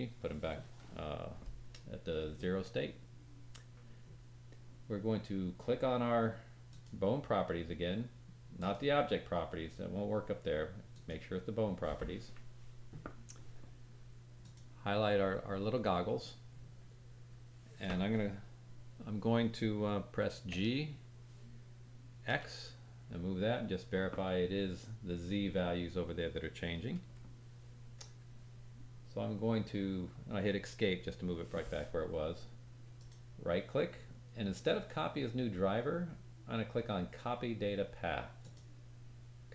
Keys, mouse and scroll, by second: 6.6 click, 8.5 click, 10.9 click, 14.4 click, 20.5 g, 32.9 right click.